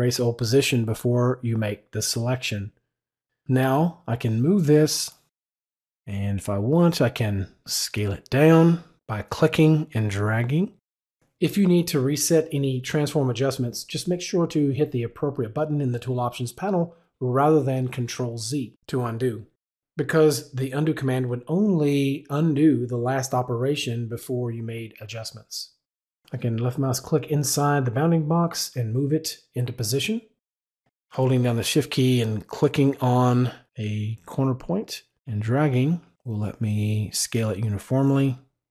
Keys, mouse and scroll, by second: 4.1 click, 9.5-10.7 drag, 17.9 click, 19.2 click, 23.8 click, 26.9 click, 33.8 shift+click.